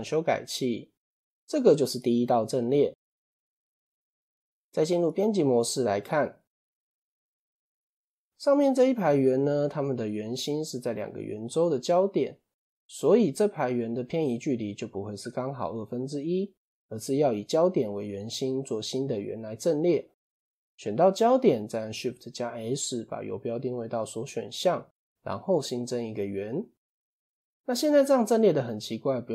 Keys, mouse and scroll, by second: 1.3 click, 1.8-2.8 scroll up 2, 2.8-3.3 scroll down 2, 3.7 click, 4.9 Tab, 5.4 scroll up 3, 6.7-8.2 shift+middle drag, 8.2 click, 19.1 click, 20.1-20.6 scroll down 2, 21.1 shift+s, 24.3 shift+a, 27.3-28.4 scroll up 1, 28.4 scroll down 1.